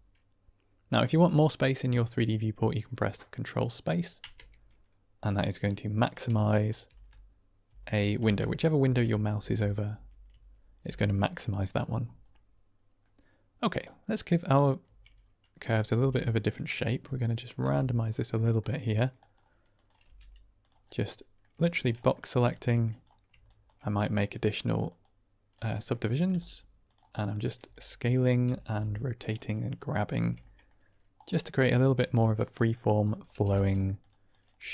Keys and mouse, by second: 1.4-2.5 middle drag, 4.1 ctrl+space, 5.3-6.3 drag, 6.8 ctrl+space, 8.1 ctrl+space, 8.7 ctrl+space, 9.3 ctrl+space, 10.2 ctrl+space, 10.7 ctrl+space, 12.2-12.9 drag, 13.7 click, 14.0-14.5 middle drag, 14.7 Tab, 15.7 click, 15.9 g, 16.4 click, 16.7 middle click, 17.5 r, 17.9 click, 18.2 middle click, 19.7 click, 19.9 g, 20.5 click, 20.8 middle click, 21.4 Tab, 22.1 middle drag, 22.4 Tab, 22.8 click, 24.1-24.9 right drag, 25.4 click, 25.8 middle click, 26.2 g, 26.7 click, 27.2 middle click, 27.5 s, 28.0 click, 28.3 r, 28.6 r, 29.1 click, 29.5 middle click, 30.1 Tab, 30.4 middle click, 31.1 click, 31.3 middle click, 31.7 Tab, 32.5 click, 33.3 g, 33.9 click, 34.2 click, 34.5 g.